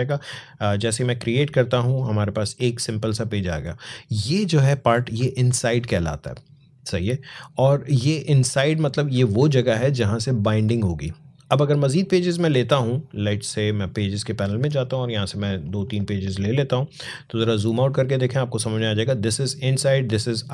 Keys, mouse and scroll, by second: 2.1 click, 13.1 click, 16.9 alt+scroll down 1, 17.9 alt+scroll up 1.